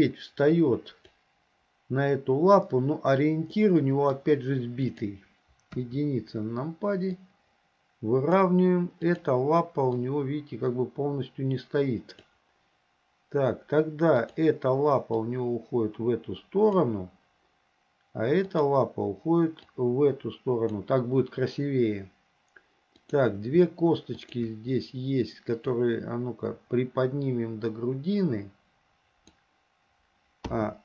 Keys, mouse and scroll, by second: 3.6-4.2 middle drag, 4.9 click, 5.8 KP_1, 7.3-8.5 drag, 9.2 click, 10.1-12.4 drag, 14.2 click, 15.2-16.9 drag, 18.5 click, 19.8-20.9 drag, 23.0 click, 24.2 shift+click, 25.9-29.4 drag, 30.5 a.